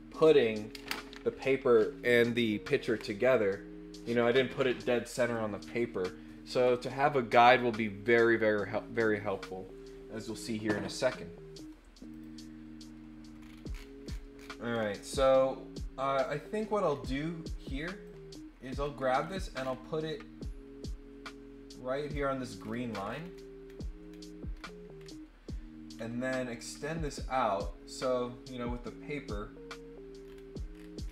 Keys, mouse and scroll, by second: 12.1 click, 13.3 scroll up 2, 13.6-14.8 scroll down 8, 14.0 middle click, 14.9 click, 15.8 click, 16.5 scroll up 2, 16.6 scroll down 2, 16.9 scroll up 2, 18.0-22.1 drag, 18.6 scroll down 2, 19.1-19.7 scroll up 2, 22.5 scroll down 1, 22.9 middle click, 23.1-24.2 scroll down 9, 24.5-25.1 scroll up 6, 25.9 scroll up 1, 27.0-31.1 drag, 30.2 scroll down 1, 30.7-31.1 scroll up 3.